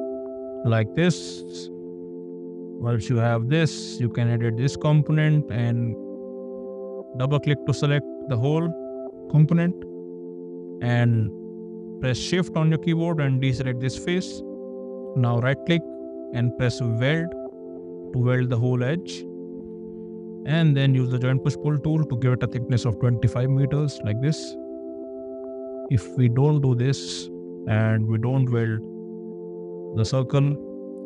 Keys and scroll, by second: 5.7 p, 6.3 space, 20.5 p, 22.4 2, 22.7 5, 23.7 Return, 24.2 space, 26.4 space, 27.1 ctrl+z, 27.8 ctrl+z, 28.8 ctrl+z, 30.3 p.